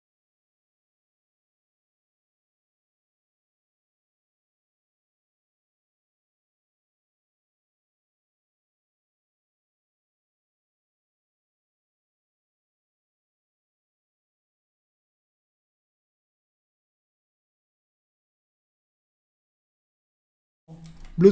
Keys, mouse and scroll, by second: 18.2 super+2, 19.2 super+1, 20.6 ctrl+2.